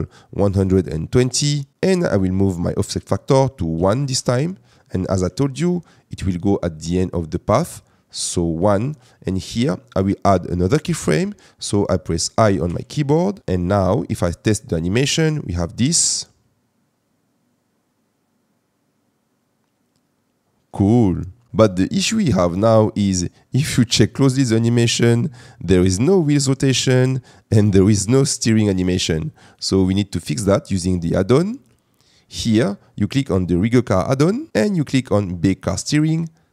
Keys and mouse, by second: 2.7-4.0 drag, 12.6 i, 14.1 click, 15.9 space, 20.7 space, 21.5 middle click, 24.0 space, 28.9 space, 29.5 click, 33.6 click.